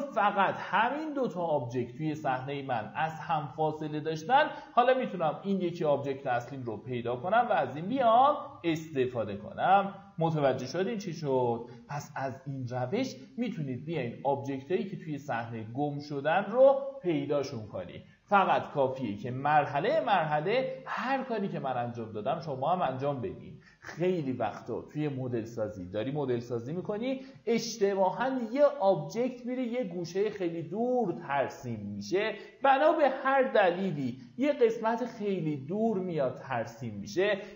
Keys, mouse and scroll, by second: 5.5 scroll down 1, 6.0 alt+middle click, 6.7-37.5 drag.